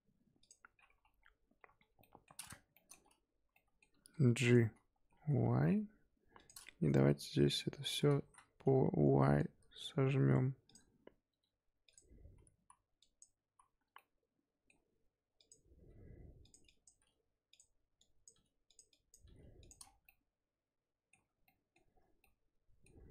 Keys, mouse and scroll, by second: 0.4 click, 1.0 KP_1, 1.5 KP_1, 1.8 KP_3, 2.0 middle drag, 2.3-2.7 scroll up 3, 2.7-3.0 shift+middle drag, 3.0-3.5 scroll up 1, 3.5-3.9 middle drag, 3.9 g, 5.0 g, 6.8 Tab, 7.8 a, 8.1 s, 10.9-11.3 scroll up 3, 11.3 g, 12.2 scroll up 2, 12.5 z, 13.0 click, 13.4 z, 13.9-15.3 middle drag, 15.3 click, 15.7 g, 16.6 click, 16.9 g, 17.9 click, 18.3 g, 18.9 click, 19.2 g, 19.8 scroll down 5, 19.9 Tab, 20.0-21.2 middle drag, 21.2 scroll up 3, 21.4-22.0 middle drag, 22.0 Tab, 22.2-23.1 middle drag.